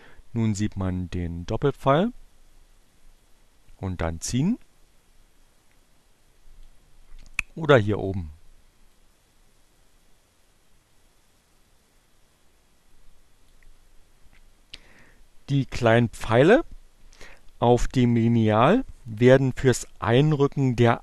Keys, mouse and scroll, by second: 7.8-12.6 drag.